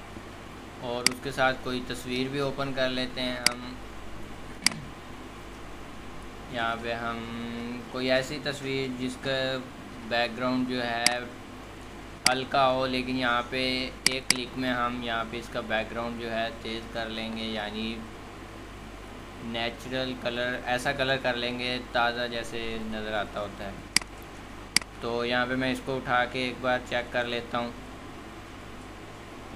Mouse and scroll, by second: 3.7 scroll.